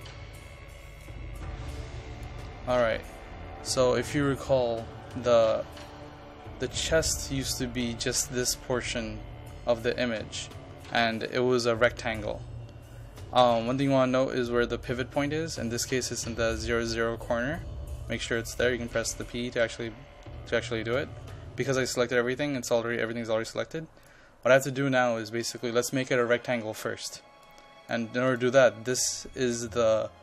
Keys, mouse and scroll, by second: 1.1-19.2 drag.